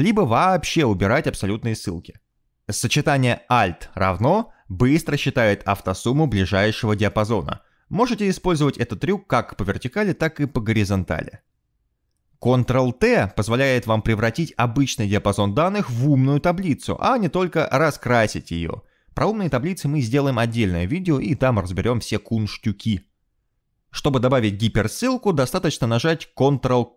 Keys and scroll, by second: 1.7 Escape, 5.3 alt+=, 6.5 Return, 9.2 alt+=, 9.8 Return, 12.9 ctrl+a, 15.7 ctrl+t, 25.7 ctrl+k.